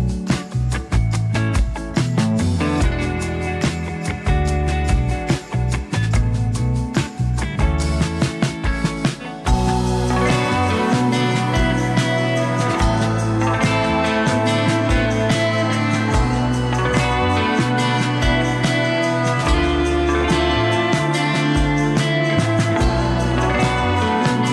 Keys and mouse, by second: 0.2 shift+d, 1.6 r, 2.3 s, 3.8 click, 4.5 shift+d, 5.3 g, 5.4 click, 6.8 shift+d, 8.9 click, 8.9 shift+f, 9.1 shift+d, 11.0 s, 11.8-13.5 drag, 13.7 ctrl+e, 13.8 ctrl+r, 13.8 ctrl+middle click, 14.1 ctrl+Tab, 14.4 f, 14.8 click, 15.3 click, 16.0 middle click, 16.2 click, 16.6 s, 17.7 g, 19.1 g, 19.8 g, 20.7 KP_1, 21.1 g, 22.6 click, 23.1 middle click, 23.5 click, 24.1 click.